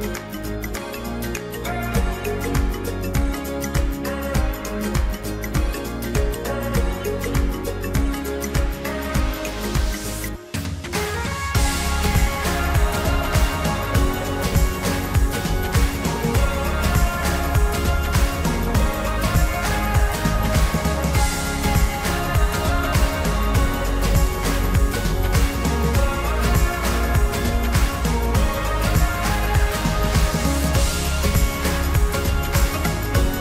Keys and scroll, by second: 15.2 ctrl+t, 22.8 ctrl+t, 32.1 ctrl+t.